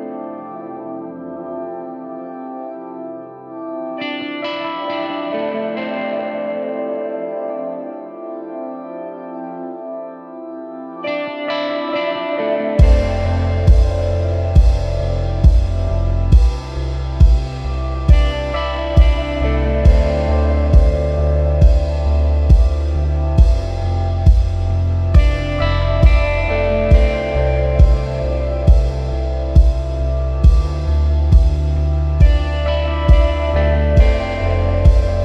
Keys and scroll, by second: 0.6 super+-, 1.1 super+=, 1.8 space, 2.3 space, 2.4 space, 14.3 super+=, 15.0 super+=, 15.6 super+-, 16.9 i, 20.6-21.8 typing.